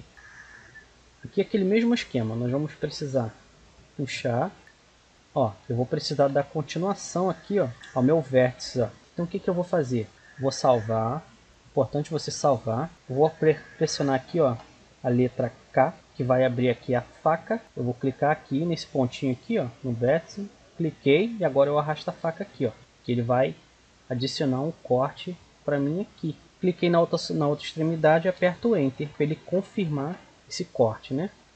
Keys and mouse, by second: 0.2-1.3 middle drag, 1.3-3.4 right drag, 2.5-4.2 drag, 4.7-8.6 middle drag, 9.1 middle click, 10.1 a, 10.1 z, 11.2-12.9 drag, 15.6 k, 30.0 right click, 30.4 click, 30.4 z, 31.4 a.